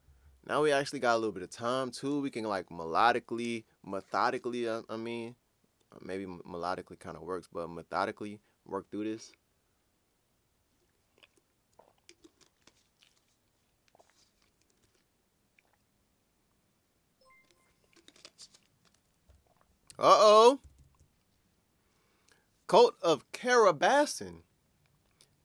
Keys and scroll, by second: 20.0 super+Tab, 20.6 super+Tab, 20.8 super+Tab.